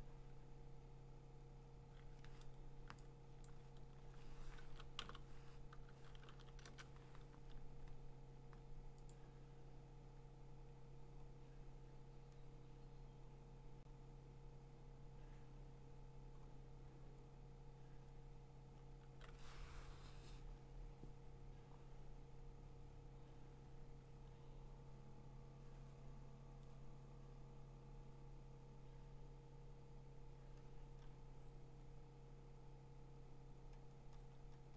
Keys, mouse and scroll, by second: 1.7-2.5 typing, 3.5 click, 3.9 ctrl+x, 4.6 ctrl+t, 4.7-5.5 typing, 5.7 Tab, 6.3 ctrl+v, 6.7 Return, 9.1-10.4 drag, 11.4 click, 11.4 scroll down 3, 12.3-14.2 scroll down 5, 14.2-14.9 scroll down 1, 14.9-15.9 scroll down 1, 16.5-18.2 middle drag, 16.5-18.2 scroll down 6, 19.0-19.6 scroll down 5, 21.2-25.2 scroll down 20, 27.8 scroll down 3, 28.4 scroll, 29.0-29.7 scroll, 30.4-31.5 scroll, 33.5-34.1 scroll, 34.1 scroll up 10, 34.3 scroll down 11, 34.4-34.7 scroll up 24.